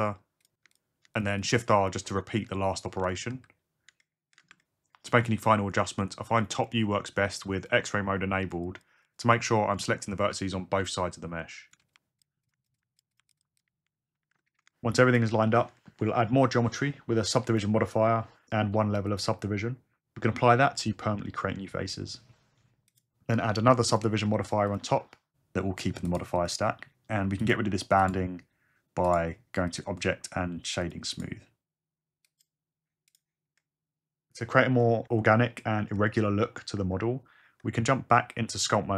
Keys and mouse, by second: 0.7 shift+click, 1.4 shift+click, 1.6 shift+r, 1.9 click, 2.4 shift+r, 3.3 alt+z, 5.9 g, 6.0 click, 6.4 g, 6.6 click, 7.0 click, 7.0 g, 7.2 g, 7.6 click, 7.7 click, 8.6 click, 9.1 click, 9.1 g, 10.2-13.3 typing, 10.9 click, 11.3 ctrl+z, 12.4 click, 13.3 click, 14.2 alt+z, 14.3 Tab, 17.6-19.2 drag, 23.0-24.0 drag, 24.8-26.5 drag, 28.0 click, 29.1 Tab, 30.8-32.5 drag, 37.0 Tab.